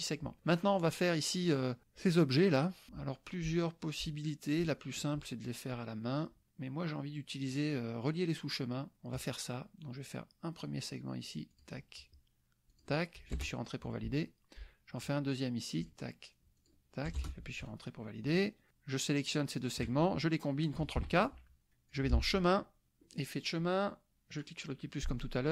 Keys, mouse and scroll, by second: 2.9 click, 9.1 click, 11.6 click, 12.7 click, 13.3 Return, 15.8 click, 16.6 click, 17.2 Return, 17.6 9, 19.3 shift+click, 21.1 ctrl+k, 21.9 click, 23.2 click, 24.3 click.